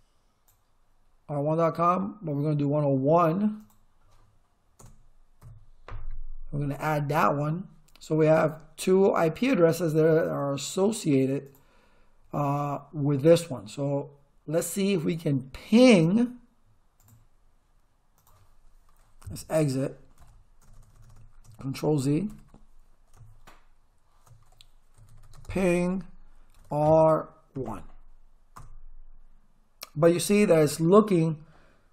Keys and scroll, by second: 4.8 BackSpace, 5.4 1, 20.2 z, 20.6 Return, 22.3 ctrl+z, 23.2 Return, 24.7-27.5 typing, 28.6 Return.